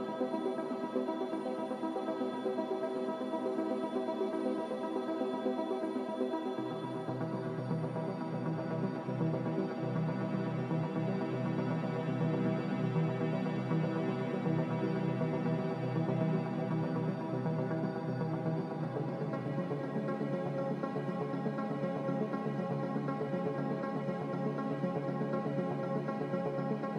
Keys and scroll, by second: 2.8 z, 9.9 a, 12.1 z, 14.4-15.3 typing, 15.6 Return, 26.3-26.9 typing.